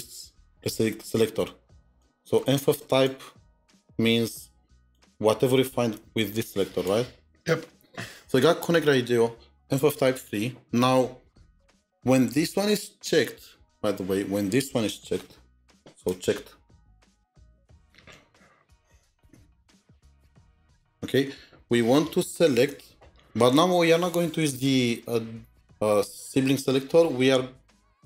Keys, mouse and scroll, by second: 17.7 double click, 18.4-20.6 typing, 20.1 Tab.